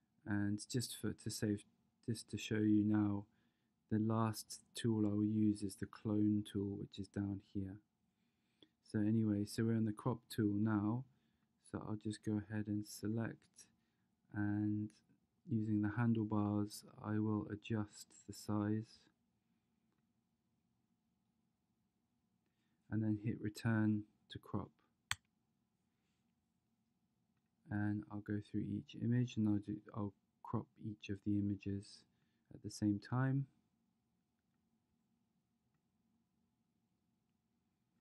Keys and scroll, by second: 25.3 Return.